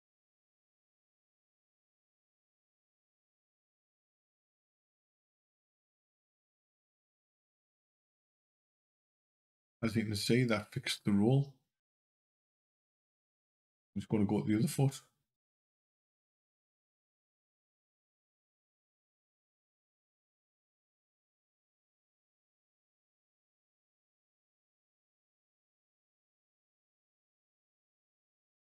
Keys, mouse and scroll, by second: 0.7 click, 4.0 click, 13.7 click, 15.4 click, 17.3 click, 22.5 click.